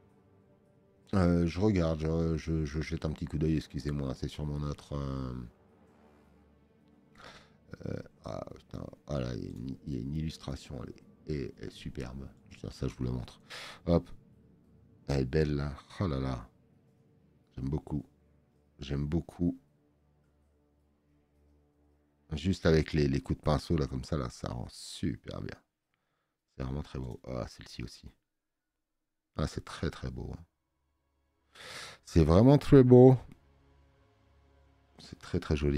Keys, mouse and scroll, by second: 13.3 click, 14.3-14.7 scroll up 2, 35.5 scroll down 1.